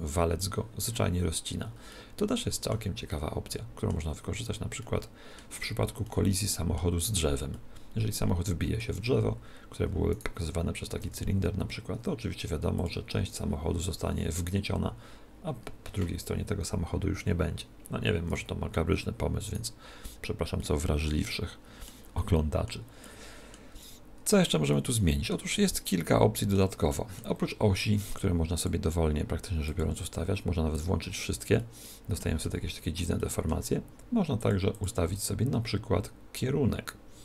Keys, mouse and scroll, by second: 1.9-9.4 middle drag, 10.3 right click, 11.1 r, 12.8 click, 19.6 right click, 20.6-28.8 middle drag, 28.2-32.4 drag, 31.6-34.8 middle drag, 34.6 click.